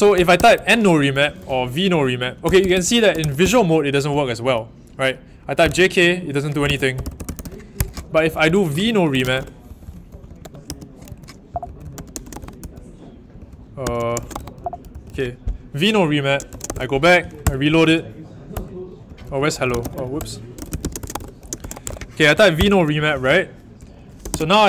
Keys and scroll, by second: 0.0-17.4 typing, 18.5 Return, 18.7-24.6 typing.